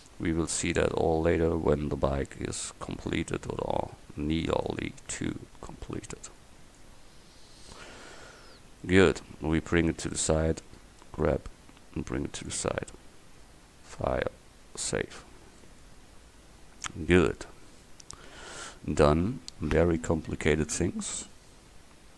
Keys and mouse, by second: 0.0 middle click, 0.4 middle click, 1.0 Tab, 1.6 a, 2.2 c, 4.6-7.1 drag, 7.1 Tab, 11.1 g, 12.7 a, 13.9-15.8 drag.